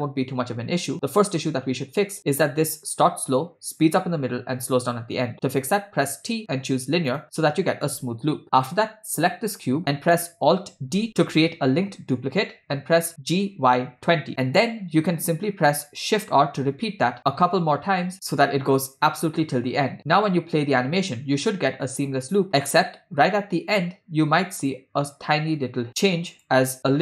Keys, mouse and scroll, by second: 2.1 space, 5.8 t, 9.2 click, 11.1 alt+d, 16.4 shift+r, 17.0 shift+r, 18.2 click, 20.2 space, 25.9 space, 26.6 click.